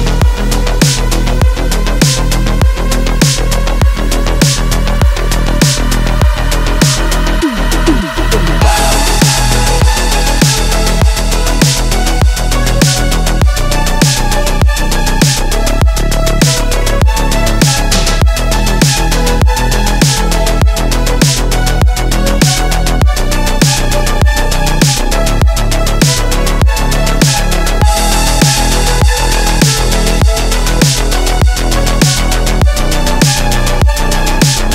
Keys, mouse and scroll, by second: 0.4 alt+scroll up 1, 1.2-2.4 drag, 2.8 space, 2.9 click, 3.1-3.4 space, 4.5 click, 4.8 space, 5.9 click, 8.3-12.7 typing, 14.0 space, 14.1 click, 14.4 space, 15.5-17.0 drag, 17.1 space, 17.2 click, 17.5 space, 19.1 click, 30.9 click, 33.6 space, 33.7-34.2 click, 34.0 space, 34.2 space.